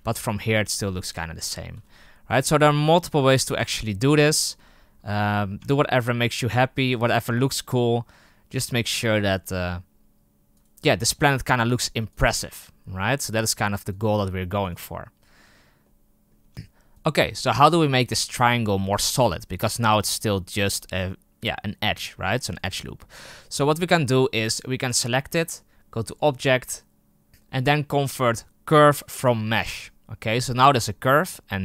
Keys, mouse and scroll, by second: 1.3 right click, 1.7 g, 3.9 KP_0, 5.1 right click, 5.5 Tab, 10.5-11.0 right drag, 11.0 s, 12.0 right click, 12.5 s, 14.6-15.8 right drag, 15.8-16.3 middle drag, 16.3 Tab, 16.5-16.9 scroll up 1, 16.9 right click, 17.8 right click, 19.6 right click, 19.9-20.6 scroll up 8, 20.6-21.7 scroll down 8, 21.7-22.5 scroll up 1, 22.5-23.5 right drag, 29.5-31.5 drag.